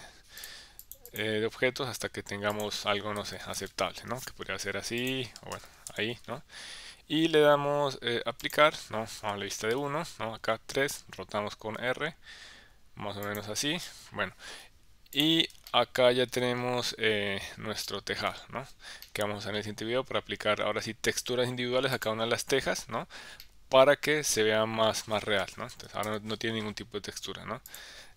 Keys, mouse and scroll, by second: 0.4 click, 0.8 click, 2.6-4.9 drag, 5.0-6.3 drag, 8.5 click, 9.2 KP_1, 9.6 KP_3, 11.8 r, 13.3 click, 13.8 KP_1, 15.2 click, 15.7 shift+middle click, 19.0-21.4 middle drag, 21.9 click, 23.4-24.9 middle drag, 25.4 KP_1, 25.7 KP_3, 26.0 KP_1, 27.7 click.